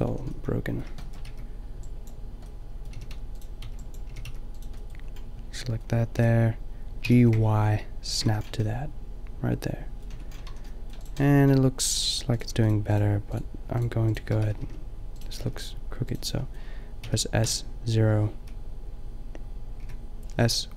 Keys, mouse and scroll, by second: 0.0 a, 1.2 b, 2.7 middle click, 3.0 g, 3.4 click, 3.7 b, 4.1 g, 4.8 click, 6.2 g, 8.3 a, 9.3 click, 10.1 Tab, 10.5 a, 11.4 Tab, 14.5 s, 15.3 shift+s, 17.0 s.